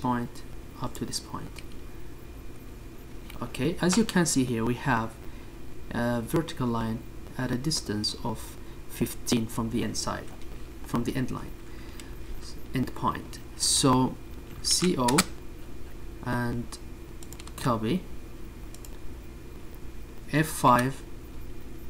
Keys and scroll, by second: 0.0-0.7 typing, 1.7 space, 3.1 space, 6.9 Escape, 19.1-20.0 typing.